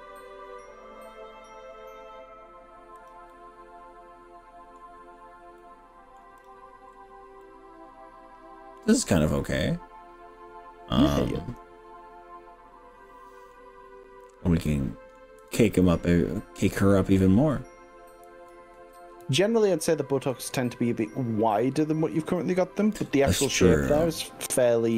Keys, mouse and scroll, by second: 3.0 click, 3.3-4.8 middle drag, 5.0-5.6 scroll down 2, 5.6-6.2 middle drag, 6.4 click, 7.0 scroll down 1, 7.6-13.5 middle drag, 14.7-15.2 middle drag, 19.2 z, 20.7-23.0 middle drag, 23.2 middle click, 24.2 scroll up 3.